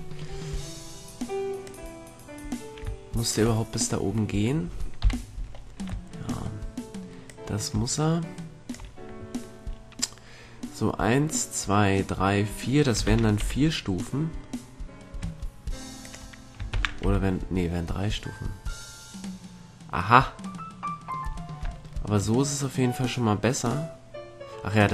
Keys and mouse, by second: 5.1 KP_3, 5.7-8.3 middle drag, 13.2 shift+d, 16.4-18.3 drag, 16.9 shift+d.